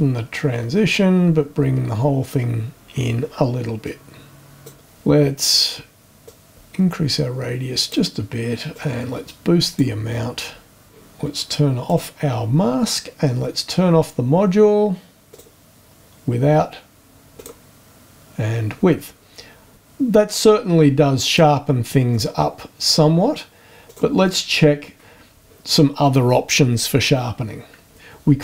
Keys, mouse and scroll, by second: 0.3-1.2 shift+scroll down 3, 1.4-1.8 scroll up 2, 3.8 click, 6.2-8.1 drag, 8.7-10.0 drag, 11.9 click, 15.3 click, 17.3 click, 21.2 click, 22.1 click, 23.9 click, 24.2 click.